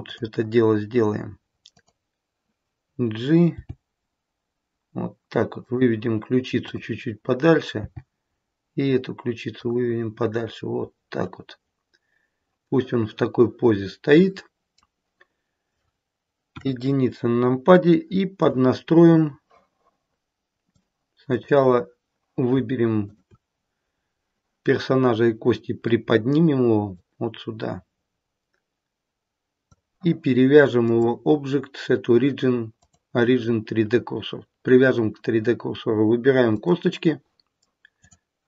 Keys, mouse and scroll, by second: 0.0 click, 1.8 click, 3.5 g, 7.2 click, 7.7 g, 10.6-10.9 scroll down 3, 12.7 middle click, 16.5 KP_1, 17.7 shift+middle click, 18.7-19.1 scroll up 2, 19.2 scroll down 2, 20.6 click, 22.9 shift+click, 23.8-26.0 scroll down 1, 26.0-26.9 scroll down 1, 26.9 click, 30.8 click, 36.5 click, 37.9 click.